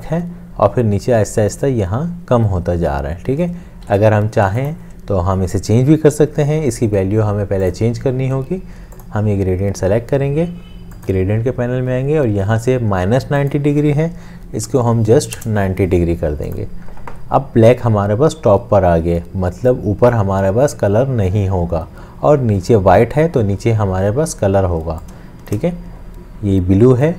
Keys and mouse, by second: 3.9 ctrl+z, 14.4 Home, 14.7 Delete, 15.4 Return, 25.3 shift+click.